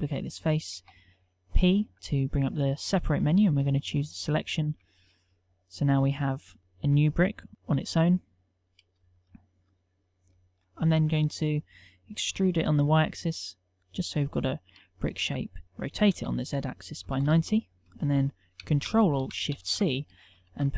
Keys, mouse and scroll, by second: 0.7 p, 4.8 Tab, 7.7 g, 11.2 Tab, 12.3 e, 15.2 Tab, 16.0 r, 19.5 ctrl+alt+shift+c.